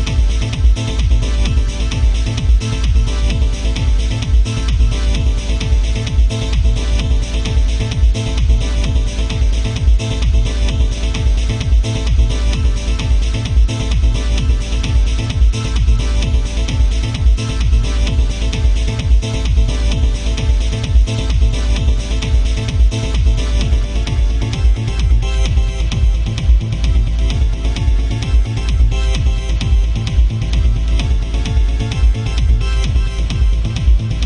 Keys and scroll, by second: 5.2 ctrl+z, 14.8 ctrl+z, 17.1 ctrl+z.